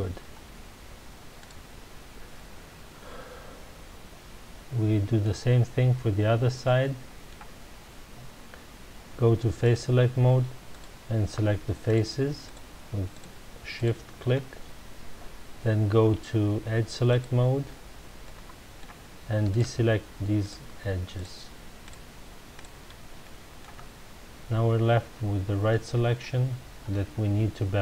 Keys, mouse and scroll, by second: 1.4 click, 2.3-5.4 middle drag, 5.9-6.5 scroll down 1, 6.6-9.6 middle drag, 9.6 click, 10.7 click, 11.8 shift+click, 12.4 shift+click, 13.1 shift+click, 13.7 shift+click, 17.1 click, 18.2-19.5 middle drag, 19.5 shift+click, 20.4 shift+click, 21.1 shift+click, 21.8 shift+click, 22.5 shift+click, 23.2 middle click, 23.8 scroll up 1, 24.8-25.3 scroll down 1, 25.7-27.8 middle drag.